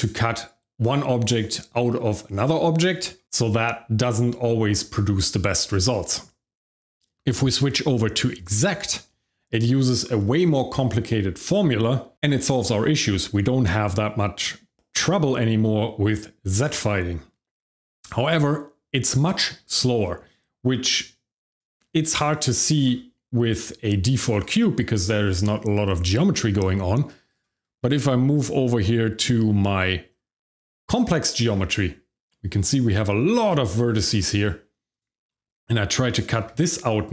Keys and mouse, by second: 8.5 click, 21.5 click, 22.0 click, 22.8 g, 24.4 right click, 27.3-27.6 drag, 27.8 shift+middle drag, 29.2 shift+middle drag, 29.6 middle click, 31.1 shift+z, 33.3 shift+z, 33.7 middle drag, 34.8 click, 35.3 shift+middle drag, 36.4 g.